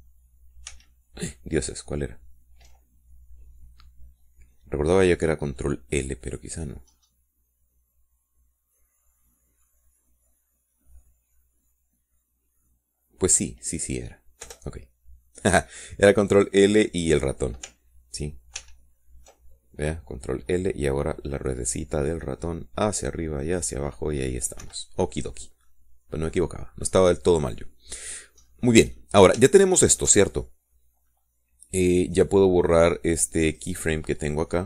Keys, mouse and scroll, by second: 0.1 ctrl+l, 2.1 ctrl+a, 7.0-8.2 middle drag, 8.2-9.2 scroll up 2, 9.2 scroll down 2, 9.4 scroll up 2, 10.0 scroll up 2, 10.6 scroll down 2, 11.0 scroll up 2, 11.5 scroll down 2, 13.4 scroll down 2, 13.8 scroll up 2, 14.2 scroll down 2, 15.8 Return, 20.0 ctrl+l, 21.4 middle click, 21.9 middle click, 22.2 middle click, 23.1 middle click, 23.5 scroll up 2, 23.9 scroll down 2, 25.1 scroll up 1, 26.0 Escape, 26.8 scroll down 1, 27.0 middle click, 28.0 scroll down 1, 28.3-29.7 middle drag, 29.8 middle click, 30.4-31.6 middle drag.